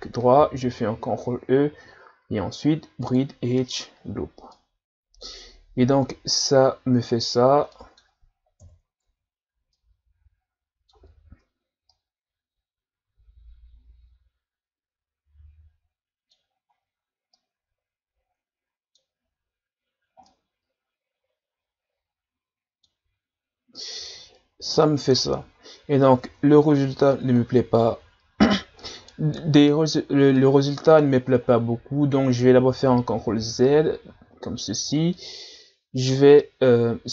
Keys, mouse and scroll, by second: 0.9 ctrl+e, 4.0-4.5 scroll down 2, 4.5-7.5 middle drag, 7.7 middle click, 8.6 KP_1, 9.1 Tab, 9.7-14.9 middle drag, 16.5 scroll up 3, 16.7 Tab, 17.3-23.3 middle drag, 24.1-25.7 middle drag, 25.7-26.2 scroll down 2, 26.2 Tab, 26.8-27.1 scroll down 1, 27.1-30.1 middle drag, 30.3-31.4 middle drag, 31.4 scroll up 3, 32.5 ctrl+z, 33.0 ctrl+z, 35.1-37.1 middle drag.